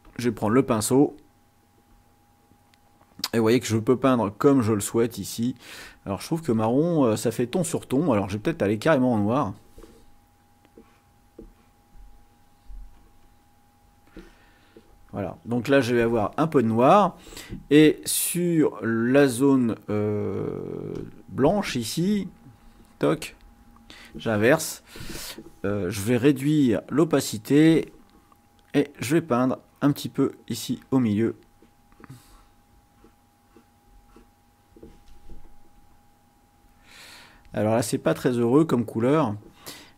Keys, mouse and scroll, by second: 0.0 click, 2.0-6.6 drag, 9.2 click, 10.5 click, 11.5-13.4 drag, 21.0 click, 22.8 click, 23.8 click, 26.8-27.8 drag, 29.6 click, 30.6-32.6 drag, 32.9 click, 33.4 click, 34.0 click, 36.1-36.5 ctrl+scroll up 1, 38.3 click.